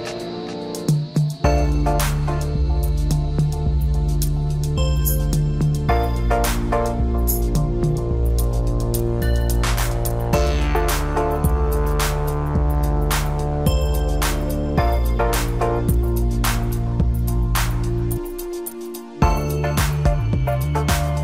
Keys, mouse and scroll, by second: 0.6-2.1 middle drag, 2.1 Tab, 3.1 ctrl+a, 4.4-6.1 middle drag, 7.9-9.2 drag, 9.5 click, 9.9-12.9 middle drag, 13.1-13.5 scroll down 1, 13.5-14.1 middle drag, 14.1-14.8 scroll up 2, 14.8 click, 15.1-16.8 middle drag, 16.8 click, 19.2 drag, 20.4-21.2 drag.